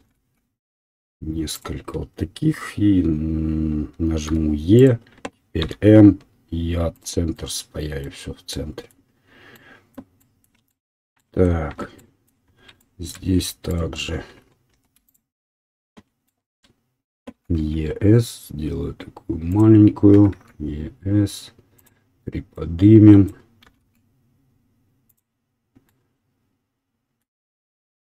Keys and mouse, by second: 0.1 e, 4.4 e, 5.7 m, 13.7 alt+click, 13.8-15.0 alt+middle drag, 15.1-22.5 alt+middle drag, 17.3 e, 20.1 e, 22.5-25.2 drag, 23.6 e, 25.2-27.8 middle drag, 27.8-28.1 right drag.